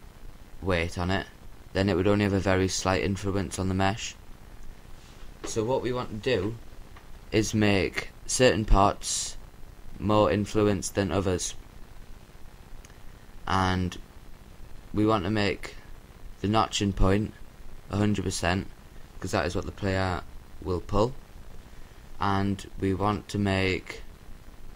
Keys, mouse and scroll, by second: 0.5 ctrl+z, 1.1-2.7 drag, 5.1-6.5 right drag, 5.7-7.3 drag, 12.6-15.2 right drag, 17.0-18.6 right drag, 19.9-23.7 drag.